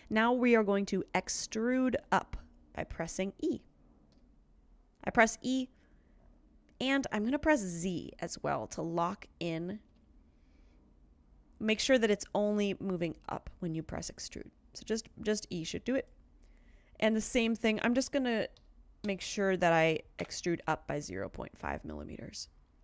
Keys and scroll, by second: 4.1 e, 8.0 z, 9.9 z, 18.6-20.7 typing.